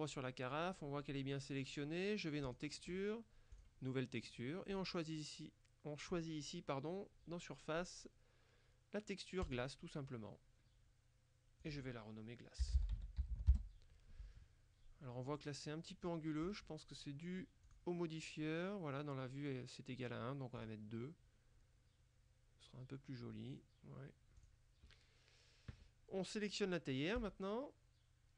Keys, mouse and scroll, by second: 2.5 click, 3.6 click, 4.8 click, 9.5 click, 11.7 click, 12.7 g, 12.8 l, 13.0 a, 13.3 s, 13.6 Return, 16.5 click, 17.7 click, 20.7 click, 24.5 click, 27.3 right click.